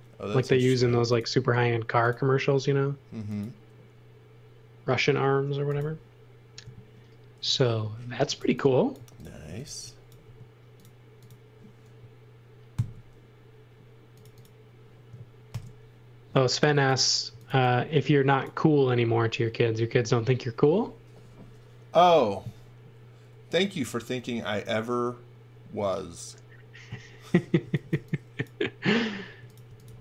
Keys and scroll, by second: 0.9 m, 8.1-10.2 typing, 12.7 super+x, 15.5 alt+shift+v, 17.0-18.0 typing, 27.6 x, 27.9 v, 29.3-30.0 typing.